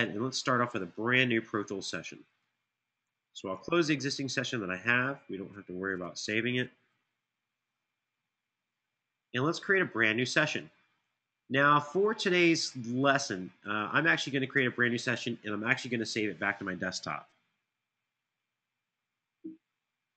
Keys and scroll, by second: 3.2 shift+super+w, 6.7 Return.